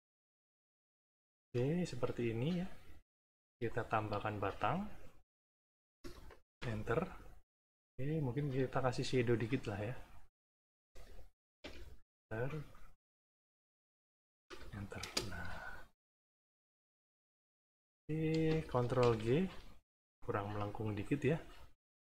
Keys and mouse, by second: 0.5 click, 2.2 click, 2.9-4.1 drag, 4.2 shift+click, 4.9 click, 6.5 Return, 9.2 click, 10.1 click, 11.6 Return, 12.7 click, 13.3 click, 14.4 Return, 15.0 space, 16.1 shift+click, 16.9 shift+click, 17.7 shift+click, 18.9 ctrl+g, 20.1 click, 21.0 click, 21.5 click.